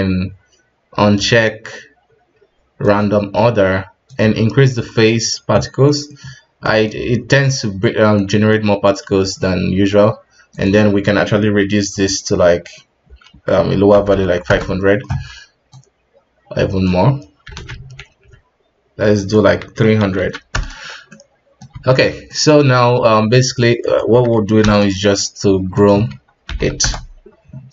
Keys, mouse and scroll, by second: 2.8 click, 4.0-5.8 drag, 5.8 middle click, 6.2-6.6 scroll up 1, 6.6-7.2 middle drag, 7.2 KP_1, 8.1 middle click, 9.0 KP_1, 10.5-13.6 drag, 14.0 KP_0, 15.7-17.2 drag, 17.2-17.5 scroll down 3, 17.5 alt+a, 17.8 scroll up 2, 19.1-20.1 drag, 20.1 KP_0, 21.1-21.8 middle drag, 21.8 KP_1, 22.2 right click, 23.8-27.7 drag.